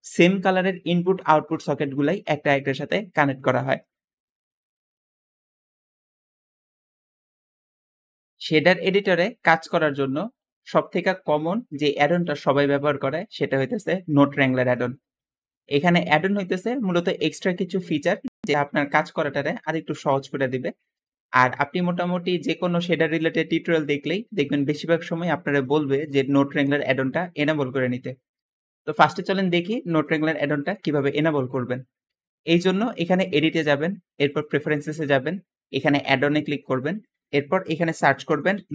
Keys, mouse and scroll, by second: 37.8 shift+n, 38.0 o, 38.2 d, 38.4 e.